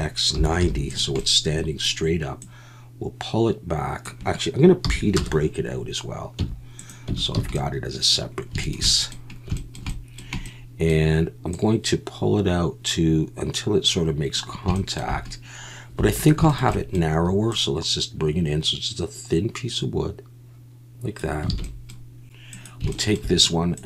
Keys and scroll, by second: 0.3 9, 0.6 0, 4.8 p, 6.4 Tab, 7.1 Tab, 7.4 a, 16.0 3, 21.6 alt+a.